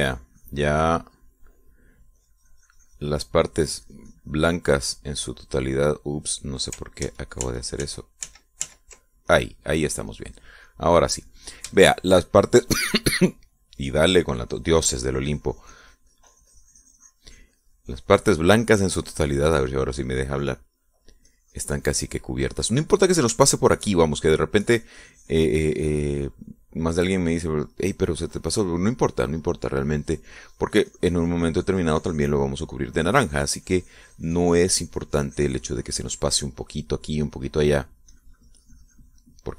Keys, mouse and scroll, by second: 2.1 middle click, 3.5-4.9 drag, 5.1 click, 5.8-6.9 middle drag, 7.2 middle click, 8.3 ctrl+z, 10.6 ctrl+middle click, 10.6 ctrl+click, 11.1-12.9 middle drag, 13.1 shift+middle click, 14.7 middle click, 15.3-22.0 drag, 22.1 middle click, 22.1 click, 24.8 shift+click, 25.9-27.9 drag, 28.3-30.6 drag, 30.7-33.8 drag, 33.8 middle click, 37.6-39.5 middle drag.